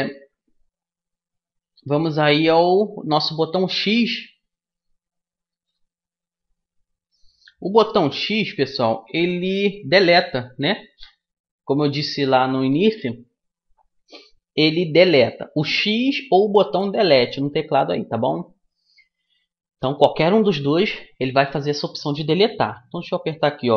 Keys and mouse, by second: 9.4 x.